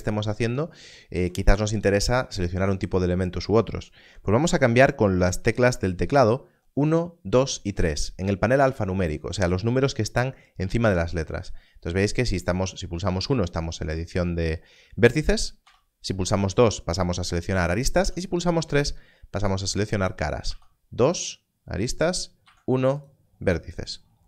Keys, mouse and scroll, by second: 0.6 click, 15.6 2, 17.9 2, 18.7 click, 20.4 2, 21.1 click, 22.5 1, 22.9 click.